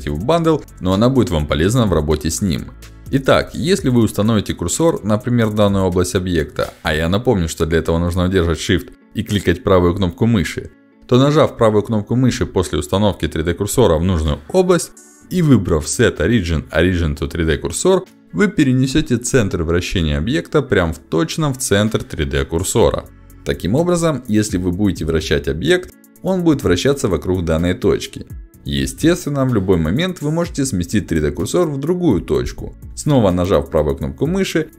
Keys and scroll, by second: 21.0 r, 25.5 ctrl+z, 26.5 Escape.